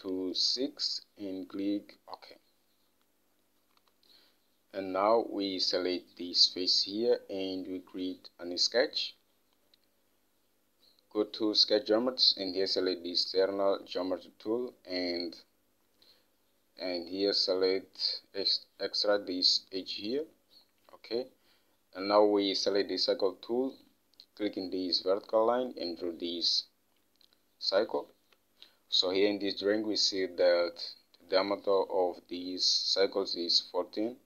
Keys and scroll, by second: 0.9 6, 4.2 Home, 28.5 alt+Tab.